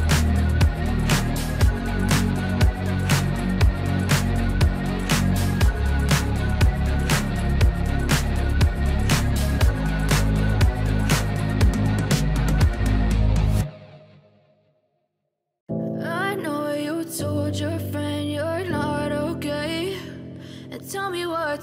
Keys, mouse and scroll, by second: 11.1 ctrl+d, 12.2-18.2 drag, 20.0 ctrl+d.